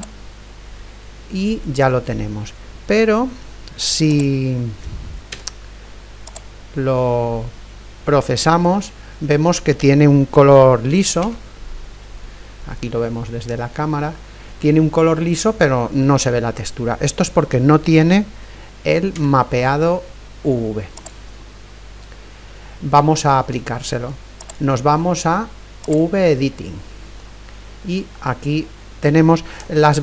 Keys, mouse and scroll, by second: 0.0-2.0 drag, 4.1-6.1 drag, 5.3 z, 11.3 KP_0, 12.5 middle click, 12.5-12.9 scroll up 1, 14.0-18.3 middle drag, 19.4 z, 21.2-23.1 drag, 24.6-26.6 drag, 27.4-30.0 middle drag, 29.0-29.6 scroll down 1.